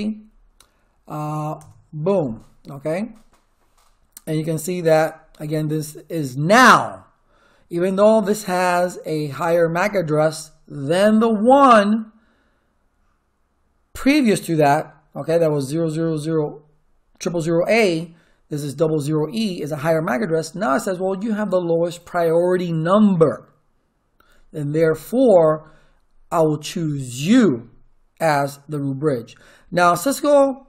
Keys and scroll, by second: 1.5 Return.